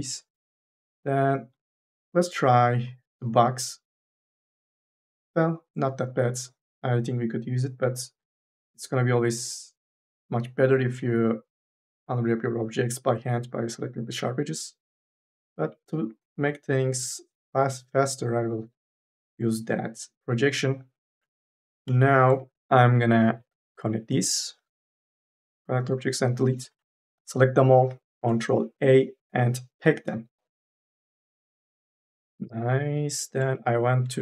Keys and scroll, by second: 15.1 3, 18.5 3, 21.5 4, 21.7 e, 26.2 3, 27.2 ctrl+a, 28.4 ctrl+a.